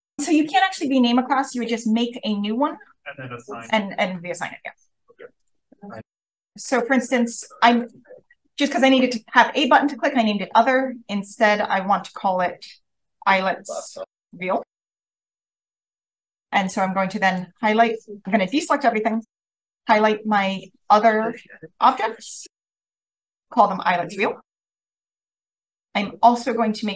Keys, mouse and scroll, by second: 2.1 right click, 3.6 click, 5.4-6.5 drag, 6.5-7.7 scroll up 1, 7.7 click, 7.7-9.2 scroll up 1, 10.5-12.0 right drag, 12.0 click, 12.7-15.1 typing, 15.7-16.1 scroll up 2, 17.2 click, 17.4 right click, 18.5 click, 18.9 click, 19.5 right click, 20.2 right click, 21.0 click, 22.1-23.4 scroll up 1, 23.4 click, 23.4-25.5 scroll up 1, 25.5 click, 25.5-26.8 scroll up 1, 26.8 click, 26.8 scroll up 1.